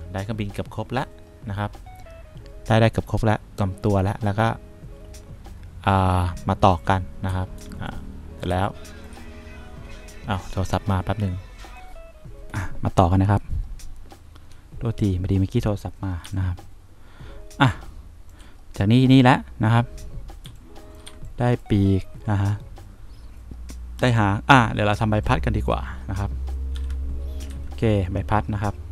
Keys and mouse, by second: 7.7 2, 8.6 1, 16.6 3, 20.8 2, 21.4 1, 25.3 2, 27.1 F2, 27.8 F3.